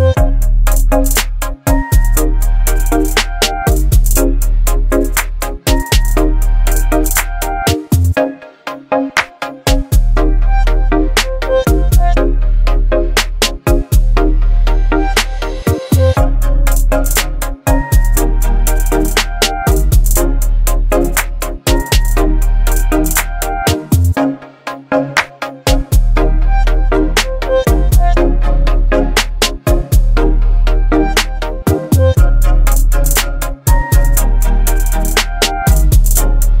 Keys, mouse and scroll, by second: 3.0 click, 4.0 click, 6.1-7.0 alt+drag, 7.6-12.0 shift+drag, 18.7-19.6 typing, 21.1-24.8 drag, 25.5 ctrl+t, 28.0-29.3 drag.